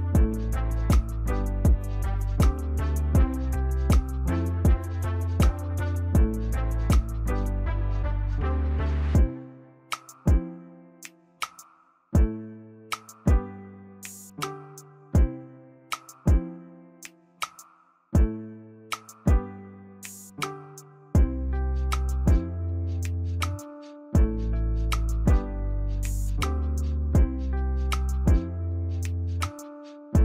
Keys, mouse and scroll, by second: 13.6 ctrl+=, 14.1 ctrl+=, 16.0 ctrl+t, 17.7 alt+click, 26.2 ctrl+a, 28.9 ctrl+d, 30.0 right click.